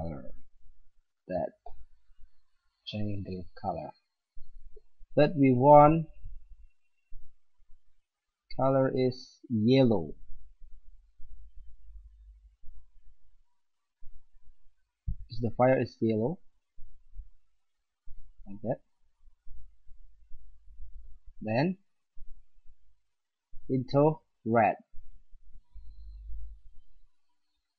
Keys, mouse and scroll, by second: 1.8-3.5 middle drag, 6.8-10.6 drag, 23.1-26.8 drag.